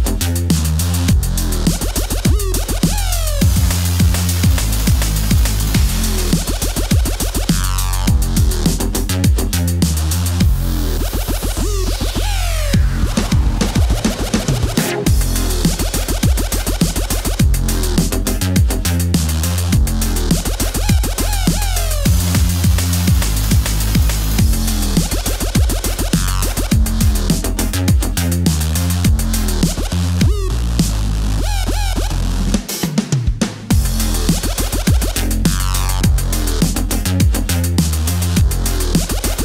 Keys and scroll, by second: 0.0-1.6 typing, 2.8-4.7 typing, 4.3 super+z, 4.5 super+x, 8.3 a, 8.4 Return, 9.0 v, 9.5 super+z, 12.8-16.8 typing, 19.2 space, 19.5 space, 21.5 super+t, 21.7 x, 22.8 super+t, 23.2 Left, 23.5 super+a, 24.5 Left, 24.5 Up, 24.7 super+d, 25.0 super+t, 25.2 f, 25.2 space, 25.7 super+a, 28.0 v, 30.6 s, 31.2 v, 32.5-33.3 typing, 33.9 super+z, 38.2 super+v, 38.3 ⌅, 38.5 super+v, 38.8 ⌅.